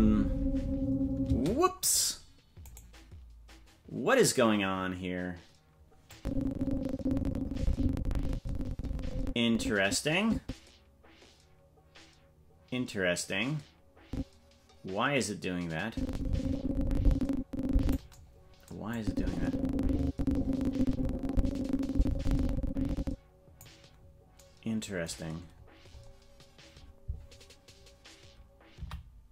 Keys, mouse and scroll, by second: 1.3 space, 2.7-3.7 right drag, 6.1-18.0 drag, 18.9-23.6 drag, 25.5-26.6 scroll up 9, 28.8 scroll up 1, 28.8 i.